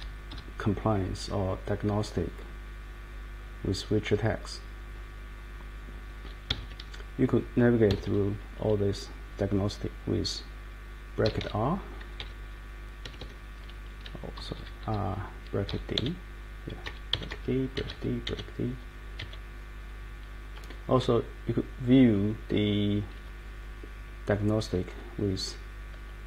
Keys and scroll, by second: 0.3 Page_Up, 6.5 Escape, 6.6 Escape, 6.7 Page_Up, 7.9 Escape, 8.0 Escape, 11.0-12.1 typing, 13.0 Escape, 14.4 Page_Down, 14.5 Down, 14.8 Page_Up, 15.6-19.2 typing, 26.1-26.2 typing.